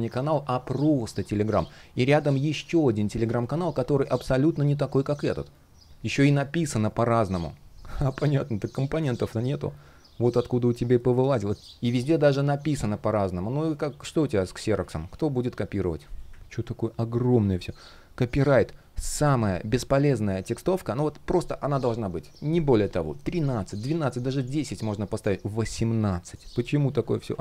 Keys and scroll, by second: 6.5 shift+o, 13.4 shift+щ, 17.4 super+\, 26.6 super+\.